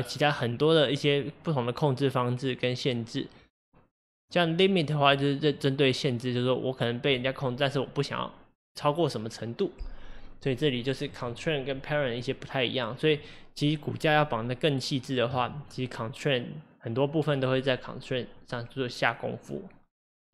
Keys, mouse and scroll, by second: 4.1-7.2 drag, 11.1 click.